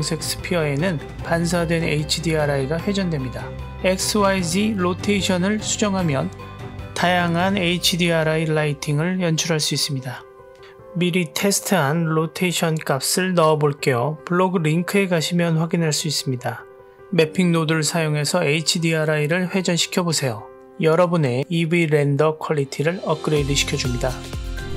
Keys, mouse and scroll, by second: 1.1 click, 1.8-4.6 drag, 5.0-8.6 drag, 9.7-10.8 scroll up 1, 11.0 click, 12.4 click, 13.6 click, 16.9 drag, 17.9 click, 18.7-19.0 drag, 20.4-21.2 drag.